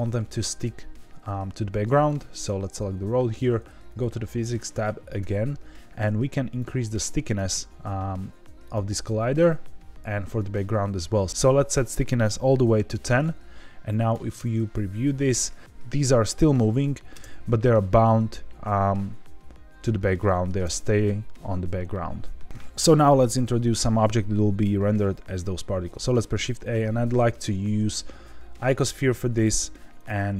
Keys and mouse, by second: 2.0 click, 3.8 click, 6.6 click, 8.6 click, 9.5 click, 13.8 drag, 14.3 space, 17.1 space, 18.8-20.5 middle drag, 20.5 space, 25.9 shift+a, 26.1 shift+a, 30.0 click.